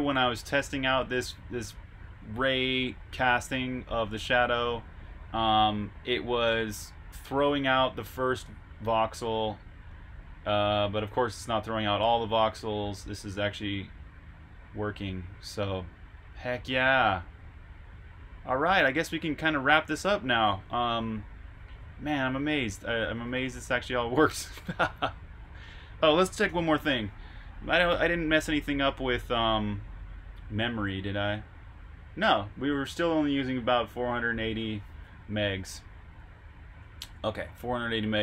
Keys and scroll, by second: 20.9 super+Tab, 23.1-23.5 typing, 26.3 super+r, 26.7-27.6 typing, 26.8 super+h, 36.9 super+q.